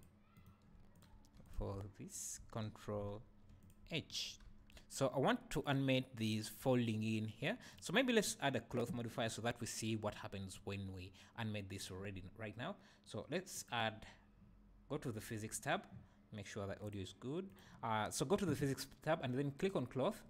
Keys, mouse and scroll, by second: 0.4-0.9 shift+right drag, 0.9 click, 1.1 Tab, 1.4 click, 3.2 ctrl+h, 4.4 Tab, 5.6 click, 7.7 click, 13.6 click, 19.6 click.